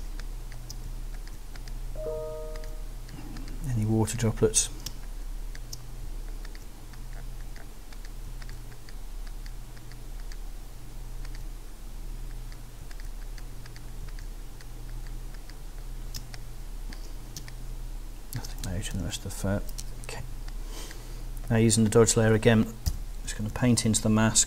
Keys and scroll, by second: 0.0 alt+space, 0.5 space, 4.9 alt+space, 16.2 space, 17.4 space, 18.9 super+0, 20.2 super+z, 20.8 z, 22.9 b, 23.3 ].